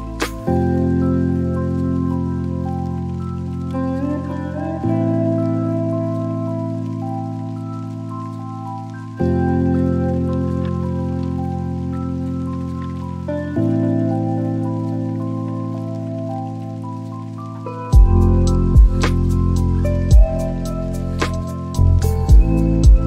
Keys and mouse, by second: 7.9 r.